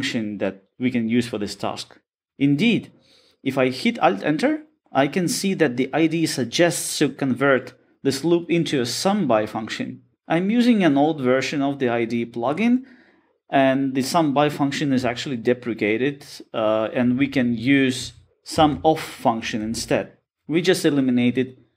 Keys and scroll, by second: 3.8 alt+Return, 18.6 Escape.